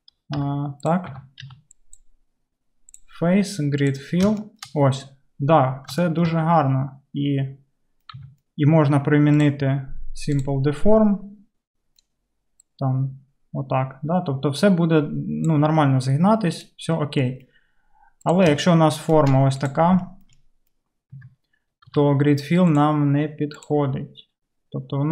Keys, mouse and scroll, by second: 0.4 g, 1.0-2.0 middle drag, 1.2 Tab, 1.5 Tab, 2.0-20.0 drag, 8.2 Tab, 20.0-24.2 shift+middle drag, 21.2 Tab, 22.0 Tab, 22.0 a, 22.7-25.1 drag.